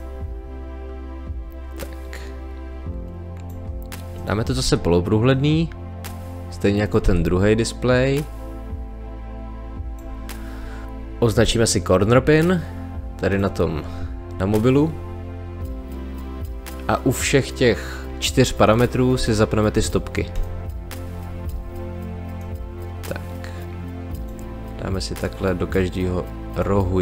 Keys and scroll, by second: 4.7 t, 7.0 t, 10.8 space.